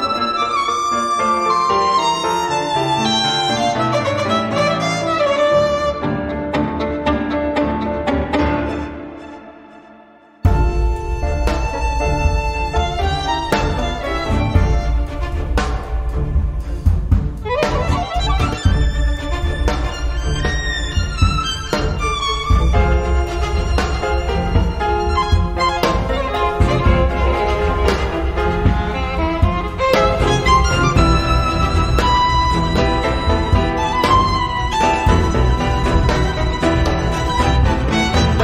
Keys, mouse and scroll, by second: 0.1-0.4 scroll down 1, 1.2 click, 2.5 click, 3.5 click, 4.7 4, 5.1 0, 5.8 click, 6.5-8.1 typing, 9.8 click, 10.7 5, 11.4 2, 12.1 click, 12.6 scroll down 1, 14.0 click, 14.9 click, 15.9 click, 16.9 4, 17.3 0, 18.5 click, 19.5 3, 19.8 4, 20.4 click, 21.2 click, 23.5-25.1 drag, 25.5 click, 26.0 click, 26.6 click, 27.3 click, 27.9 click, 29.1 -, 29.9 4, 31.2-32.7 drag, 33.1 click, 34.1 click, 35.5-37.5 drag, 37.9 click, 38.3 click.